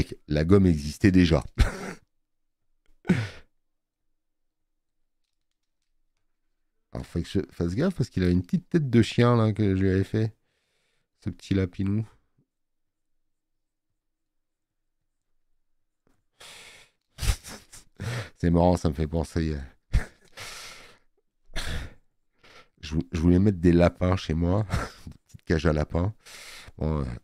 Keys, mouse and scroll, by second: 20.8 space, 21.0 click.